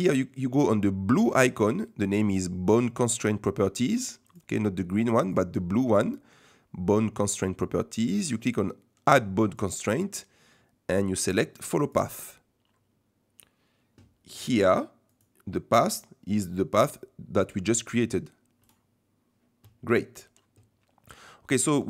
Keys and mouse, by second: 4.3 click, 5.2 click, 9.5-11.9 drag, 15.2-18.9 drag.